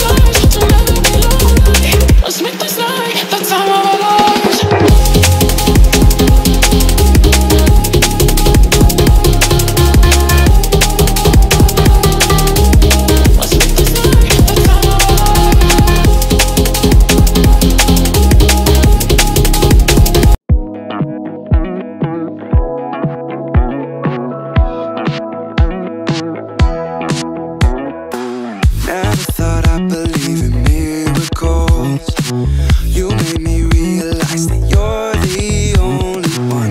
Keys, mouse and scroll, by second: 0.6 drag, 1.2 ctrl+v, 1.9-2.5 scroll up 2, 2.6-3.3 scroll up 1, 3.6-4.4 drag, 5.3-6.6 drag, 7.4-8.0 scroll up 1, 8.1-8.6 scroll down 1, 8.6 scroll down 1, 9.0-9.3 shift+middle drag, 9.4-10.0 shift+middle drag, 10.2-11.3 scroll up 3, 12.4 click, 13.6-14.9 scroll up 2, 14.9 click, 15.8 click, 16.5 click, 18.6 KP_9, 21.3 scroll down 1, 21.8-23.1 middle drag, 23.6-24.1 scroll up 2, 25.6-26.4 drag, 26.9-27.4 drag, 27.8 click, 28.5-29.7 drag, 30.5-31.3 scroll down 2, 32.3 shift+middle click, 36.3-36.7 scroll down 2.